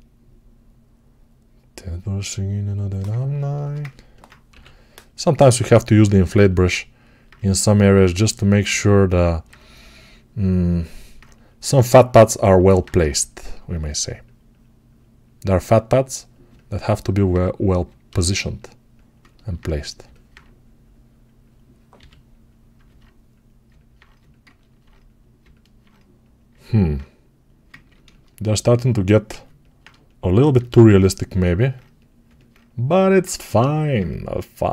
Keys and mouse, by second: 3.0-9.3 ctrl+alt+drag, 4.4 6, 9.3-16.3 right drag, 19.1-23.8 ctrl+alt+drag, 21.8 g, 23.8 right click, 26.3-32.1 alt+right drag.